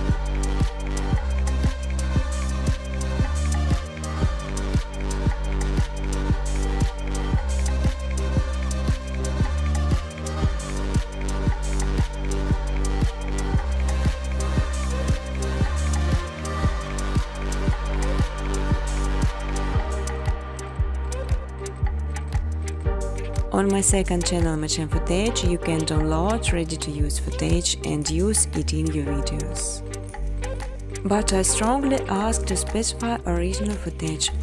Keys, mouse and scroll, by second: 0.0-0.8 typing, 2.6-6.8 typing, 4.2 click, 9.0-9.7 typing, 11.5-12.3 typing, 11.7 middle click, 11.8 middle click, 14.3-16.5 typing, 14.5 click, 17.9 click, 18.0 click, 19.3 click, 22.7-23.6 typing, 24.7 Return, 27.4 alt+click, 27.6-30.3 typing, 30.0 click, 31.4-33.4 typing.